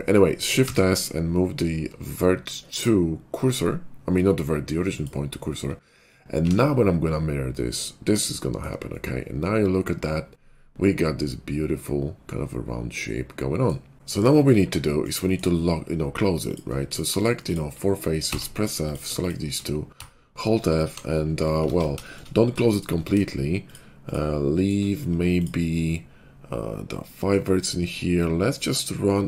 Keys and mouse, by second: 0.6 shift+s, 6.4 alt+x, 8.3-10.6 shift+middle drag, 10.6-12.3 drag, 12.9-15.1 drag, 13.9 KP_5, 15.1 shift+middle click, 15.4-16.5 drag, 16.5-18.8 shift+middle drag, 18.2 f, 18.8 click, 18.9-21.5 shift+middle drag, 19.9-20.9 f, 21.6 ctrl+z, 21.8 middle click, 25.6-27.3 middle drag.